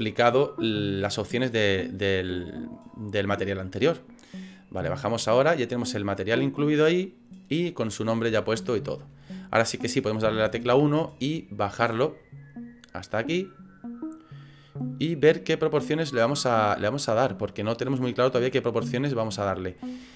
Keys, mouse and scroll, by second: 5.9 click, 8.4 shift+middle click, 10.2 KP_1, 12.0 click, 13.0 click, 17.6 scroll down 4, 17.9 middle click, 18.5 scroll up 5, 19.0 scroll down 3, 19.6 middle click, 19.6-20.1 scroll up 3.